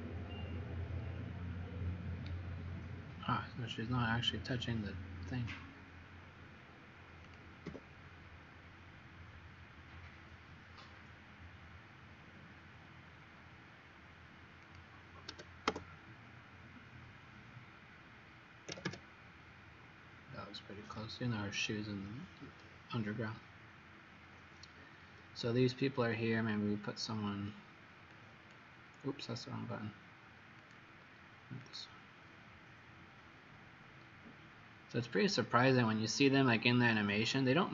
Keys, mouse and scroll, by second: 7.3 click, 7.7 Up, 14.6 click, 15.2 4, 15.6 Return, 18.7 KP_3, 18.8 KP_Enter, 28.1 click, 35.8 middle click, 37.3-37.7 scroll up 4.